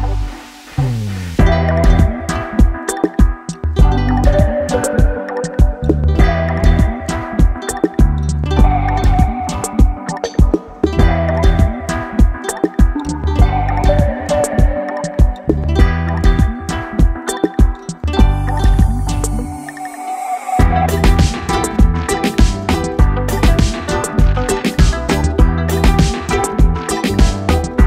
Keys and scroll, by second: 0.0-1.2 typing, 13.0 Return, 26.0-27.8 typing.